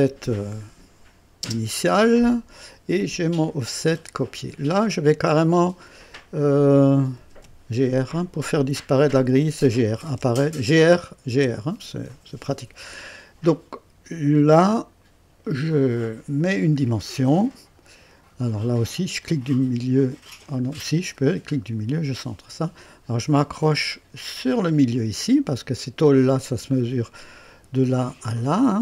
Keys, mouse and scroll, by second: 1.4 space, 3.3 click, 4.2 scroll up 1, 4.8-5.9 right drag, 6.9-7.8 typing, 9.7-11.9 typing, 16.4 click, 17.7-18.3 scroll up 2, 19.1 middle click, 20.3 middle click, 21.2 scroll up 2, 24.5 click, 25.5-26.3 scroll down 4, 26.7 right click, 27.6 scroll down 1, 28.2 right click.